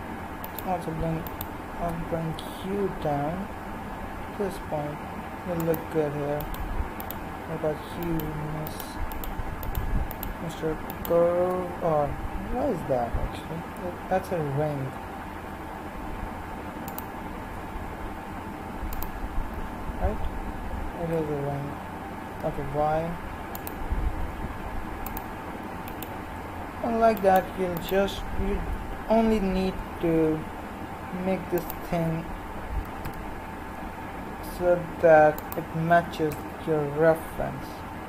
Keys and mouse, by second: 2.3 g, 6.5-15.4 right drag, 15.4 r, 17.6 g, 19.6 s, 24.2 g, 25.8-29.8 right drag, 29.8 r, 32.8 g, 35.9 s.